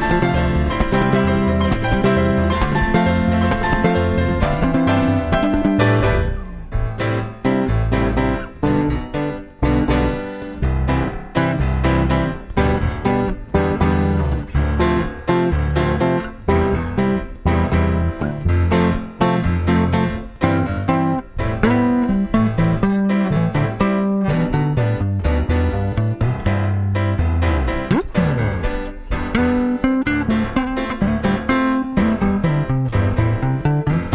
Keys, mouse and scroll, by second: 6.1-7.9 drag, 8.4-11.9 drag, 13.8 click, 14.1 middle click, 14.7 Tab, 14.7-16.4 drag, 16.5 middle click, 16.7 click, 17.5 click, 21.1-22.9 drag, 26.3-28.0 drag, 30.1-34.1 drag.